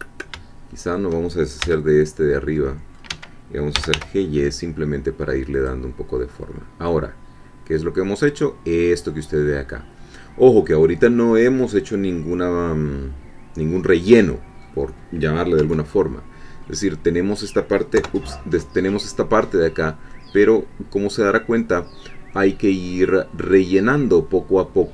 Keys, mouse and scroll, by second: 1.8 c, 2.6 middle click, 3.1 Escape, 3.5-4.4 typing, 5.6 click, 6.0-6.8 scroll down 2, 6.2-10.8 middle drag, 11.0-11.8 scroll up 1, 11.8-12.1 scroll down 1, 12.3-14.8 middle drag, 14.9-15.6 scroll down 1, 15.6 1, 16.6-18.0 scroll up 1, 18.0 3, 20.1-21.9 middle drag, 22.3-23.9 drag, 23.9 scroll up 1.